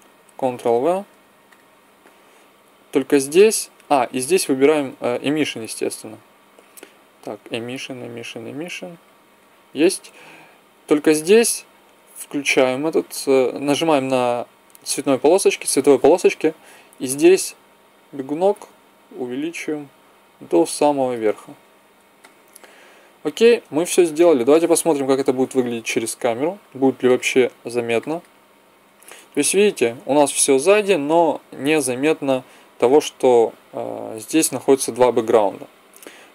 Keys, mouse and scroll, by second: 0.6 ctrl+v, 1.5-10.6 drag, 10.8-15.9 drag, 22.8-24.2 middle drag, 25.1 KP_0, 26.5 middle click, 27.0-28.4 drag.